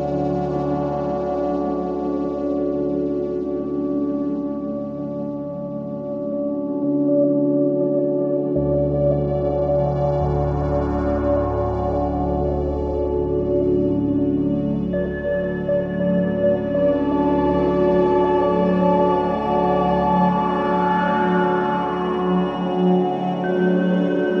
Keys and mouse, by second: 3.0 click, 3.4 KP_1, 5.2 z, 7.9-10.1 drag, 10.4 shift+a, 19.8 shift+a, 22.0-23.0 middle drag.